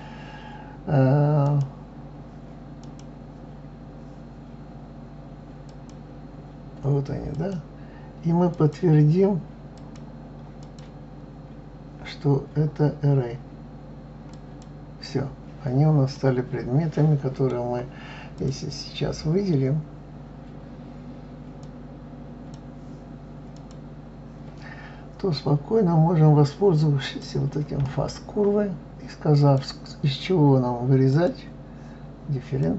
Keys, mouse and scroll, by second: 1.4 click, 2.8 click, 5.7 click, 7.3 click, 8.5 click, 9.7 click, 10.6 click, 14.3-15.1 drag, 16.1-18.4 middle drag, 18.4 click, 21.7-23.7 drag, 27.0 click, 29.3 click, 32.6 click.